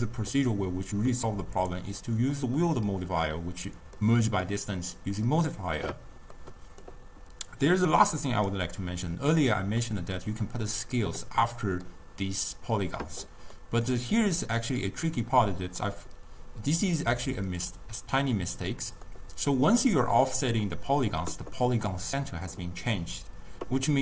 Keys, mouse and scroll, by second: 0.0-2.7 drag, 2.7-7.6 middle drag, 7.6 click, 8.0 middle click, 8.6-9.9 drag, 9.9-15.9 middle drag, 15.9-17.8 drag, 18.8-21.9 middle drag.